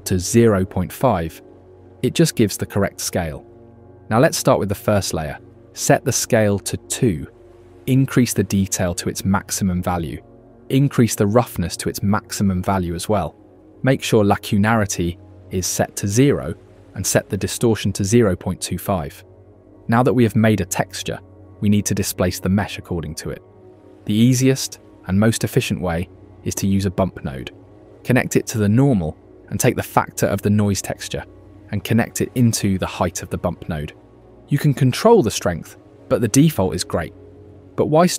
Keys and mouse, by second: 0.9 click, 4.4 click, 5.7 click, 7.2-8.2 drag, 9.0 click, 12.3 click, 16.5 click, 17.7-19.7 drag, 22.6-23.1 shift+middle drag, 23.5 middle click, 23.8 shift+a, 27.2-28.2 drag, 30.3-32.3 drag, 35.2 ctrl+shift+click.